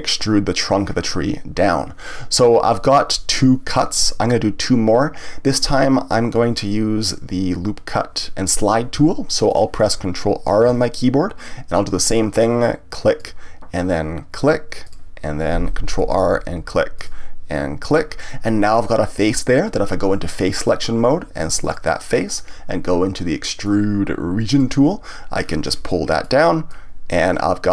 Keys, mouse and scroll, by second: 9.5 click, 10.6 ctrl+r, 14.9 click, 16.0 ctrl+r, 17.9 click, 20.5 click, 21.6 click, 23.6-25.4 drag, 25.4-25.9 scroll down 1, 25.9 middle click, 26.7-27.7 drag.